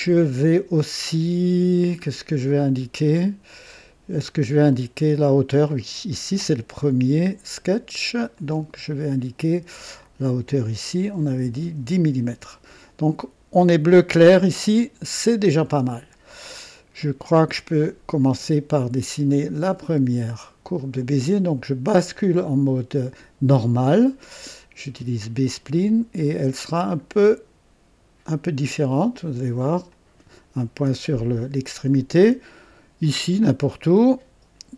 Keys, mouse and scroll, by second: 0.0 Return, 1.4-1.8 scroll down 1, 2.4-5.8 right drag, 4.6 typing, 8.3 click, 10.0 click, 11.2-12.1 typing, 14.5 right click, 16.5-17.8 right drag, 17.4-18.2 typing, 23.5 click, 25.2 click, 29.9 click, 33.0 click.